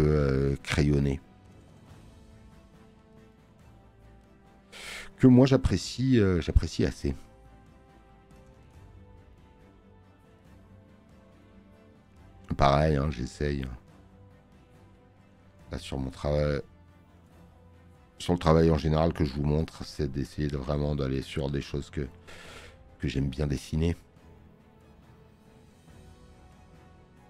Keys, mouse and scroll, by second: 11.5 click, 16.3 space, 16.5 click, 24.5 space, 24.7 click.